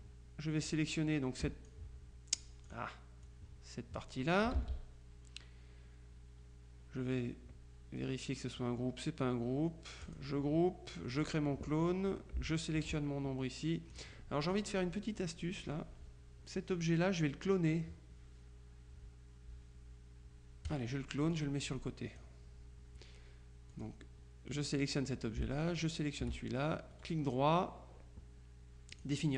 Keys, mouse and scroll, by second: 0.7 click, 2.5 click, 4.5 ctrl+click, 4.6 ctrl+z, 10.1 click, 11.2 click, 12.6 shift+click, 14.0-15.1 drag, 20.7 click, 23.8 click, 25.8 shift+click, 27.0 right click, 29.0 click.